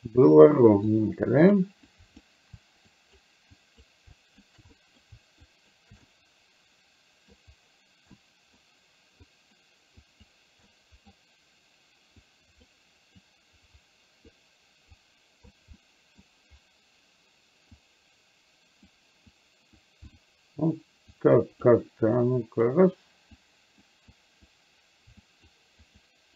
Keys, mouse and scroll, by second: 1.0 click, 2.0 click, 3.0 shift+click, 3.6 shift+click, 4.2 shift+click, 4.7 middle click, 5.5 shift+click, 6.2-7.5 middle drag, 8.2 middle click, 9.4 click, 10.1 click, 10.7 middle click, 12.4 click, 13.4-14.4 drag, 15.0 click, 15.9 middle click, 17.7-19.0 drag, 19.5 click, 20.1 click, 21.1 click, 22.2 click, 23.5 click, 24.2 click, 25.4 shift+click, 25.9 shift+click.